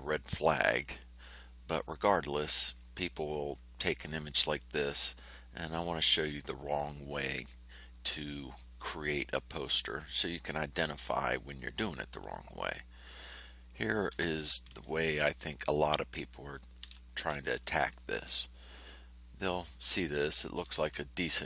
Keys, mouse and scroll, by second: 5.6-7.2 drag, 9.5 click, 11.3-13.9 drag, 16.7 r.